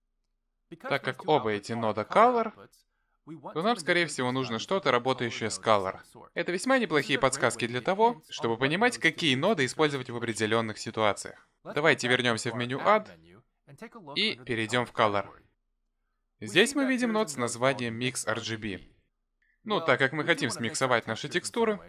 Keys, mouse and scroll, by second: 12.3 click.